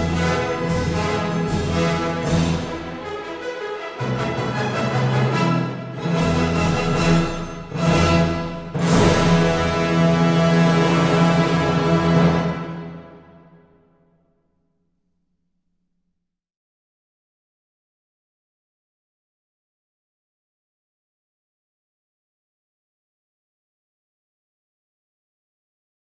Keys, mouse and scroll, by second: 0.0-0.9 scroll, 2.1 scroll, 3.5 click, 6.2-7.1 scroll, 7.1 click, 8.6 click, 10.0 8, 10.4 Return, 13.0 click, 15.2-15.8 scroll, 18.8 middle click, 22.9 middle click, 23.6 click, 25.3 click.